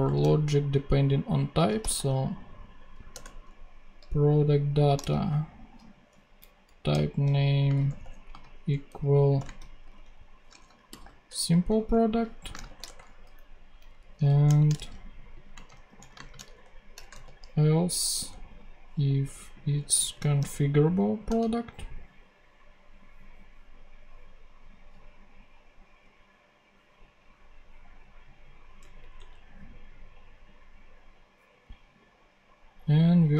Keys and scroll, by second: 1.3-2.3 typing, 3.0 Return, 3.9 shift+Return, 4.7 shift+/, 4.9 shift+., 6.3 Down, 6.8 Return, 7.6-11.3 typing, 11.8 super+Right, 12.4 super+space, 12.6 shift+[, 12.7 shift+Return, 13.9 Up, 14.2 super+Left, 14.4 shift+super+Right, 14.6 shift+super+c, 15.4-16.9 typing, 18.1 super+Return, 19.6-20.8 typing, 21.2 Return, 28.7 Tab, 33.2 a.